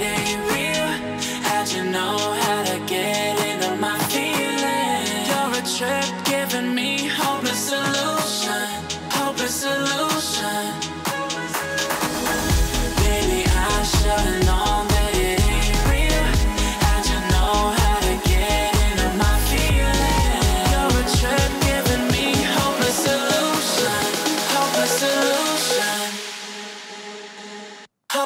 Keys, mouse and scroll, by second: 0.4-0.8 alt+scroll down 1, 1.0 click, 1.2-1.7 alt+scroll down 1, 1.7 alt+scroll up 1, 2.7 click, 3.4 F7, 4.2 click, 5.0 click, 6.6-9.4 drag, 9.8-11.3 alt+scroll down 2, 12.4 click, 14.4 alt+Num_Lock, 14.4-15.0 alt+scroll down 2, 15.1 alt+scroll up 1, 15.9-17.2 drag, 17.8-18.4 click, 18.5-18.9 alt+scroll up 1, 25.8 click.